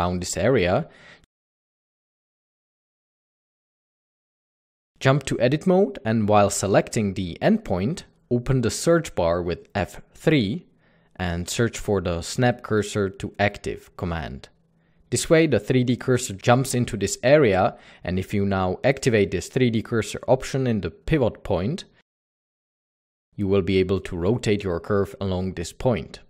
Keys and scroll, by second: 0.1 a, 0.3 g, 0.4 z, 1.1 Tab, 1.4-2.2 typing, 3.7 Tab, 4.0-5.2 typing, 4.6 Tab, 6.6 Tab, 6.8 typing, 8.6 F3, 10.0-10.5 typing, 17.3 Tab, 25.3-25.8 typing.